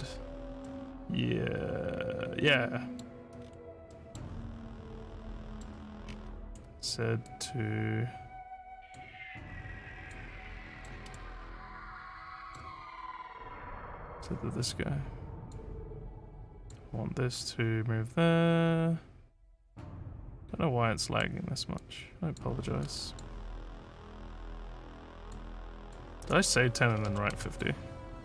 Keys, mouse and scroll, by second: 0.7 middle click, 3.4 scroll, 3.9 middle click, 4.5-5.6 middle drag, 6.0 scroll, 6.1 scroll, 7.3-8.9 drag, 10.0 click, 10.8 middle click, 11.1 right click, 11.6 middle click, 14.0-15.5 drag, 16.5 click, 17.4-21.2 drag, 21.8 click, 22.8 click, 23.9-25.3 drag, 25.8 click, 27.0 1.